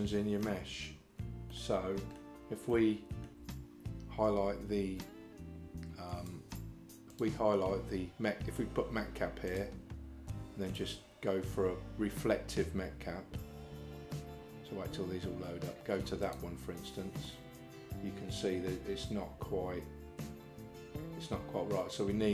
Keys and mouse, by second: 1.5 middle click, 2.8 shift+middle click, 6.1 click, 7.1-16.8 drag, 17.3-22.3 middle drag.